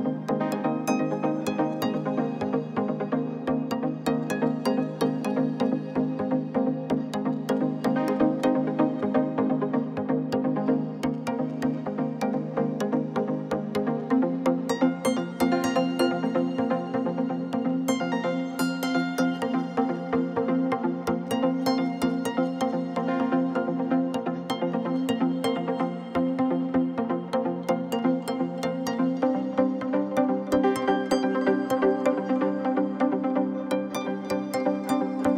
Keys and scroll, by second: 0.1-3.2 typing, 4.5 r, 4.8 x, 6.4 Tab, 6.6 1, 6.7 shift+z, 7.2 shift+s, 8.5 Tab, 9.1 Tab, 9.6-10.9 typing, 12.2 r, 14.3 shift+d, 14.6 shift+z, 16.6 ., 17.1 g, 17.2 z, 17.9 r, 21.0 r, 23.4 shift+d, 23.8 shift+z, 26.0 r, 26.7 g, 26.8 z, 27.7 alt+a, 32.1 Tab, 33.3 3, 33.6 c, 34.9 Return, 35.2-35.3 typing.